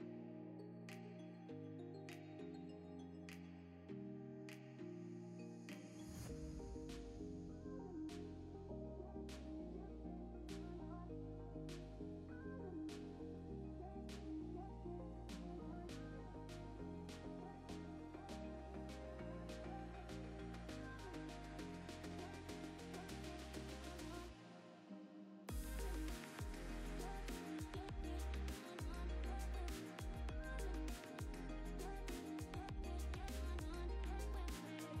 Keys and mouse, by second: 0.0-2.0 typing, 1.1 click, 3.4 shift+d, 4.6 g, 5.8 ctrl+b, 6.6 click, 6.8 click, 7.1 click, 7.3 drag, 7.9 drag, 8.4 drag, 8.8 click, 9.6 click, 10.0 click, 10.1 drag, 10.6 click, 11.6 click, 11.9 click, 12.7 ctrl+s, 12.9 z, 14.0 click, 14.3 click, 14.7 click, 16.2 click, 16.5 click, 18.9 ctrl+s, 20.3 z, 20.5 click, 20.6 g, 22.3 click, 22.5 g, 23.8 ctrl+s, 24.1 z, 25.0 click, 30.5 click, 32.8 ctrl+z, 34.6 click.